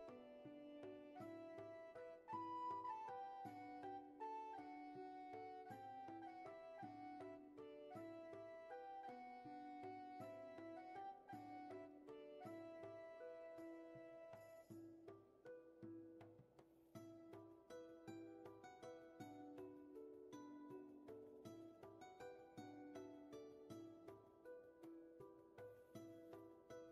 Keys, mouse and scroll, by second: 17.4 ctrl+z.